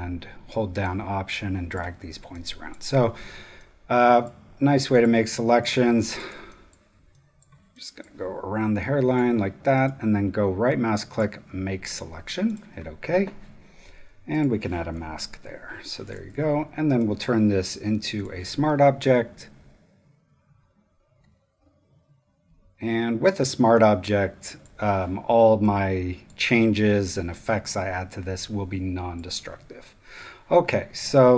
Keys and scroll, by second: 2.1 super+space, 5.6 space, 14.9 space, 15.6 super+space, 16.3 super+v.